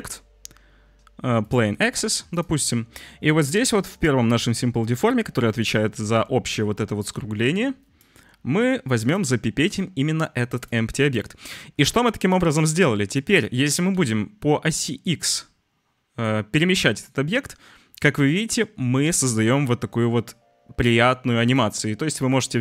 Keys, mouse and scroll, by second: 5.6-8.0 drag, 8.9 click, 13.6 g.